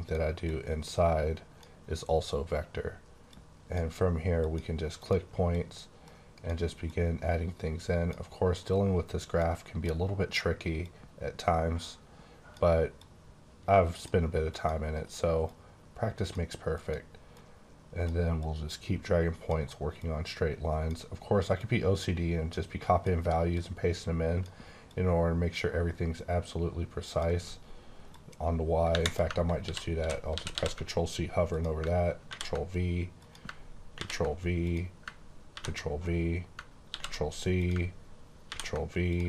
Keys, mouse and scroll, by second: 0.4 click, 3.2 click, 4.3 click, 4.9 click, 5.5 click, 6.8 click, 8.6 click, 9.7 click, 10.7 click, 12.9 click, 14.5 click, 15.4 click, 16.8 click, 17.4 click, 18.3 click, 19.9 click, 21.5 click, 23.5 click, 24.8 click, 28.1 click, 29.5 ctrl+c, 29.9 ctrl+c, 30.0 ctrl+v, 30.3 ctrl+c, 30.5 ctrl+c, 31.5 click, 32.2 ctrl+v, 33.1 click, 33.9 ctrl+v, 34.6 click, 35.5 ctrl+v, 36.8 ctrl+c, 37.5 click, 38.5 ctrl+v, 39.0 click.